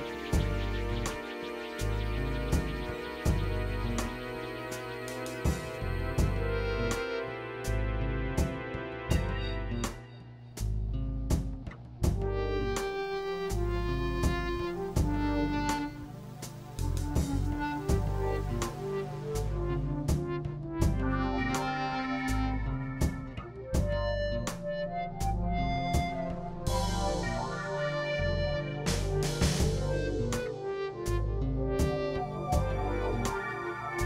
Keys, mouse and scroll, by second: 1.5 middle click, 2.3 KP_1, 2.7 KP_3, 3.6 x, 3.7 click, 4.3 click, 6.0 click, 6.8 middle click, 7.9 KP_1, 8.3 x, 8.4 KP_1, 9.3 ctrl+KP_1, 9.7 click, 10.5 ctrl+z, 10.9 x, 11.1 click, 11.7 click, 12.4-14.6 drag, 13.7 x, 14.9-16.3 drag, 16.6 click, 18.5 click, 19.3 click, 20.1 click, 21.0 click, 21.9 click, 22.5 middle click, 23.1 KP_3, 23.9 x, 24.2-25.1 drag, 25.3 middle click, 25.6 KP_3, 26.3 ctrl+KP_3, 26.9-29.7 drag, 30.0 x, 30.3 click, 30.9 click, 31.6-32.4 drag, 32.7-33.7 drag, 33.8 click.